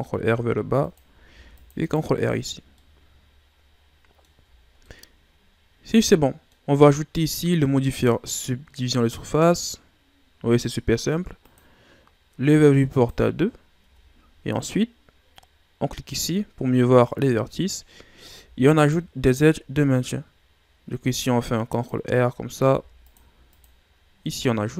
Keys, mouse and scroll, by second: 1.2 ctrl+r, 2.2 Tab, 2.5 scroll down 2, 2.7-4.5 middle drag, 4.5-4.9 shift+scroll down 1, 4.9-6.8 middle drag, 6.8 scroll up 2, 7.9 click, 9.2-11.0 drag, 11.4-13.8 drag, 13.8 Tab, 14.2-16.1 scroll up 2, 16.1 click, 17.0-18.3 middle drag, 18.3 ctrl+r, 22.6 ctrl+r, 23.9 scroll down 2, 24.2-24.7 middle drag.